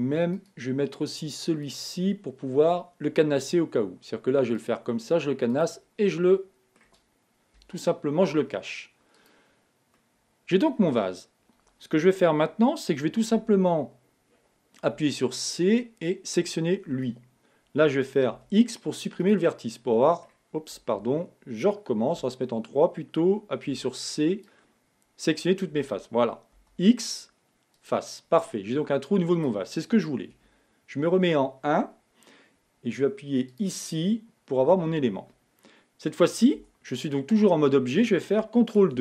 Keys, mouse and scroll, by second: 0.7-3.7 drag, 4.9 click, 5.8 click, 6.6-7.9 middle drag, 7.9 KP_1, 9.5 click, 10.2 middle click, 11.2 Tab, 13.7 a, 15.4 c, 20.1 middle click, 21.3 z, 22.5 3, 24.4 c, 28.8-30.7 middle drag, 30.7 KP_1, 33.8 click, 36.9 Tab.